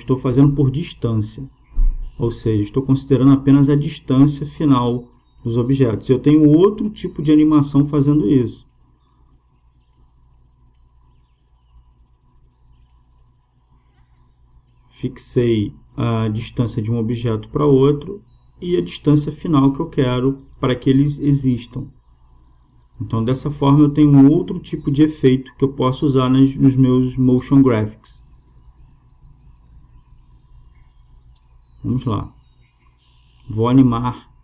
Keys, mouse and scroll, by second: 3.1-4.9 drag, 6.3-8.1 drag, 9.3-11.0 drag, 17.2-19.0 drag, 23.1-24.9 drag, 25.5-27.3 drag, 30.1-31.8 drag, 32.0 click.